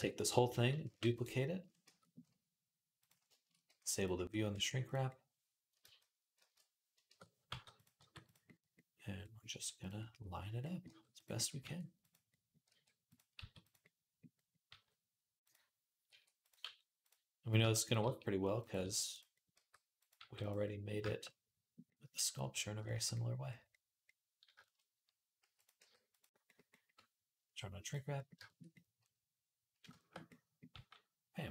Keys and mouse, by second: 0.7 shift+d, 1.4 Tab, 1.7 a, 2.8 click, 2.9-12.1 shift+middle drag, 3.5 g, 4.3 r, 5.6 ctrl+z, 6.2 ctrl+z, 6.9 shift+Tab, 7.3 g, 7.8 r, 9.3 g, 10.6 g, 11.4 g, 12.1-18.3 drag, 12.5 r, 13.2 s, 14.5 g, 15.9-20.0 typing, 18.3-27.6 middle drag, 25.2 s, 25.6 g, 27.6 click, 27.7-31.5 middle drag, 30.5 g.